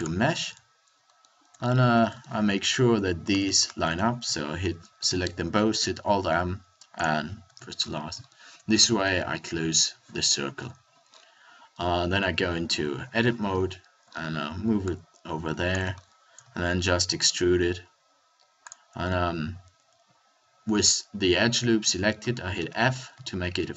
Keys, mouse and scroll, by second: 0.4 Tab, 3.9-5.8 drag, 4.9 alt+m, 7.4 Tab, 12.1 Tab, 12.7 a, 13.1 middle click, 13.1 a, 13.4 KP_7, 16.0 click, 16.4 e, 22.0 middle click, 22.7 f, 23.1 a.